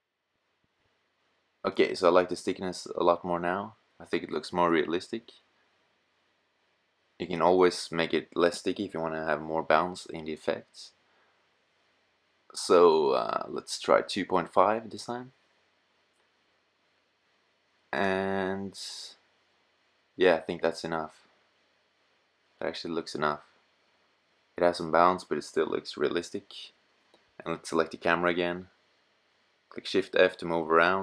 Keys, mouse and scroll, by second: 9.4-13.8 drag, 14.7-16.5 drag, 18.0-19.1 middle drag, 23.7 middle click, 25.0 KP_0, 28.9 shift+f.